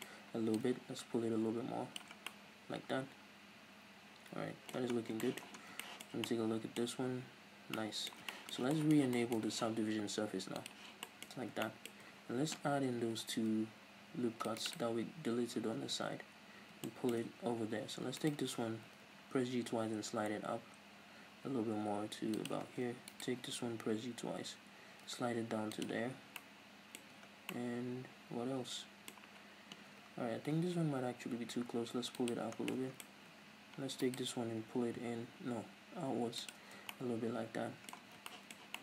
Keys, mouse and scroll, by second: 0.6-2.3 drag, 2.2 scroll down 2, 2.3-10.7 middle drag, 4.8 Tab, 5.0 scroll down 1, 5.6 scroll down 1, 6.8-7.6 scroll up 2, 7.6 scroll down 2, 10.7 click, 11.1-14.7 middle drag, 11.4 scroll up 2, 12.1 Tab, 13.0 ctrl+r, 14.7 click, 14.8 right click, 15.2 Tab, 16.1 scroll up 1, 16.7 scroll down 1, 17.0 shift+middle click, 18.3 alt+right click, 18.9 g, 22.5 click, 23.2 alt+right click, 23.7 g, 25.9 click, 26.4-29.9 middle drag, 27.2 Tab, 29.9 Tab, 30.7 g, 32.4-32.8 drag, 32.8-34.1 middle drag, 34.1 alt+right click, 34.6 g, 36.6 click, 36.7 scroll down 1, 36.8 Tab, 37.0-38.8 middle drag, 38.2 scroll down 2.